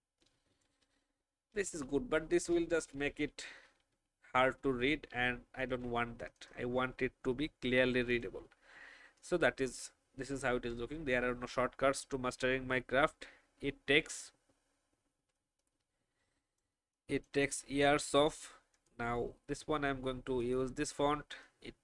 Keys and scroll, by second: 1.5 alt+shift+Down, 2.8 ctrl+z, 3.4 ctrl+z, 3.9 ctrl+z, 4.4 ctrl+z, 5.1 ctrl+z, 15.5 alt+space.